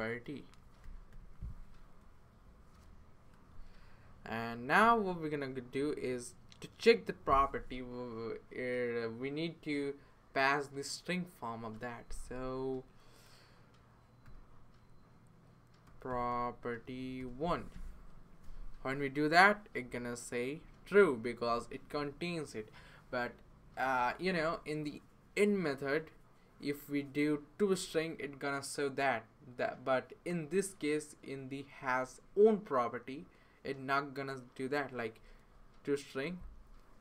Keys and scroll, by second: 0.0-1.1 typing, 2.6-3.3 typing, 4.5-5.3 typing, 6.5 typing, 14.2 typing, 15.6-16.8 typing, 17.2 Return.